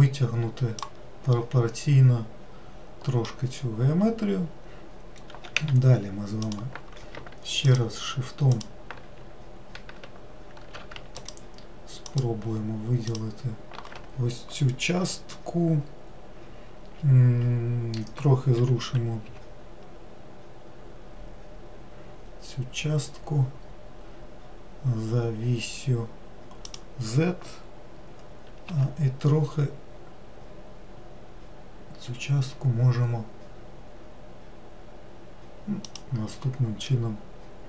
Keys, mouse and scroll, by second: 1.6-4.6 middle drag, 5.8 w, 6.7 click, 8.8-10.3 ctrl+shift+drag, 11.4 ctrl+shift+click, 12.3 ctrl+shift+click, 13.4 ctrl+shift+click, 18.9 g, 29.0 s, 37.1-37.6 middle drag.